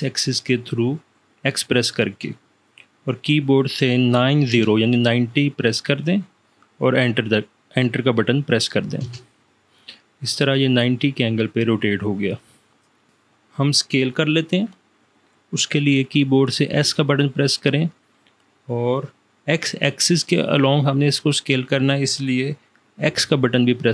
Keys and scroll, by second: 4.2 9, 4.6 0, 9.2 Return, 16.8 s, 23.2 x.